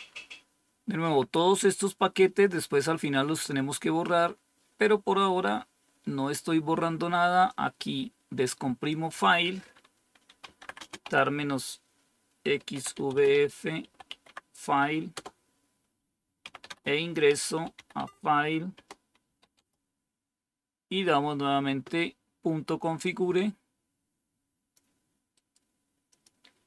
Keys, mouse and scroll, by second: 1.7-3.4 drag, 4.3 scroll up 1, 5.3-6.0 scroll up 1, 7.4-8.9 drag, 8.8-15.1 typing, 16.1-19.7 typing, 23.0-24.7 drag, 26.1 click.